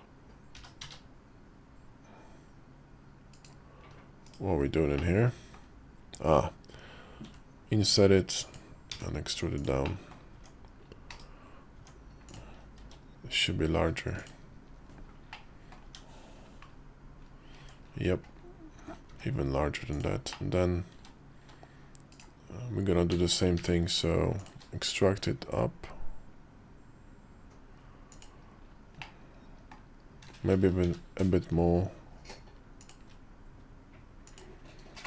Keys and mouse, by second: 0.3 g, 4.0 /, 4.7 middle click, 8.7 e, 9.8 middle click, 10.2 Tab, 10.8 /, 11.5 Tab, 12.6 s, 15.2 middle click, 15.6 Tab, 17.3 Tab, 18.8 s, 20.2 middle click, 20.7 w, 21.2 q, 22.0 right click, 22.9 w, 23.0 w, 23.3 q, 28.8 middle click, 30.6 q, 33.6 click, 34.9 q.